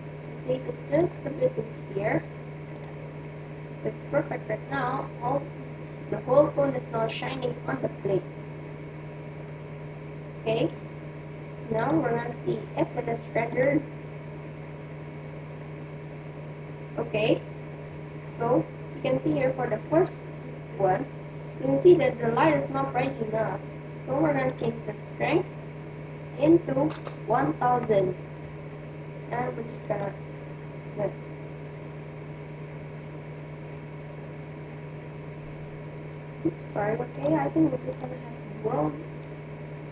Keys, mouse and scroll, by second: 3.2-4.9 middle drag, 9.5-11.2 middle drag, 11.8-13.3 drag, 13.4 click, 24.6-26.4 drag, 27.1 0, 36.3-39.5 drag.